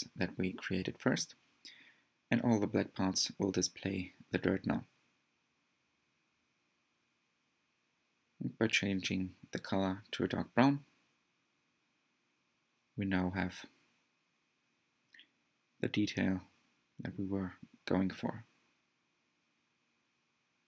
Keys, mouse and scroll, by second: 11.2 click, 13.4-13.9 scroll up 3, 15.2 scroll down 2, 16.6 click.